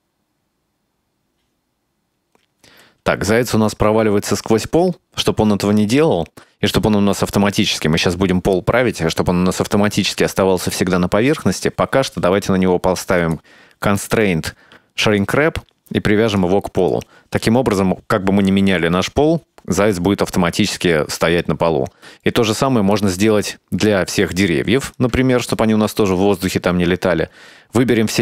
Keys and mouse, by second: 2.8 space, 3.6 right click, 14.2-15.4 drag, 16.4 click, 22.2 middle click, 23.7-24.3 middle drag, 25.0 right click, 25.6 shift+right click, 26.1 shift+right click.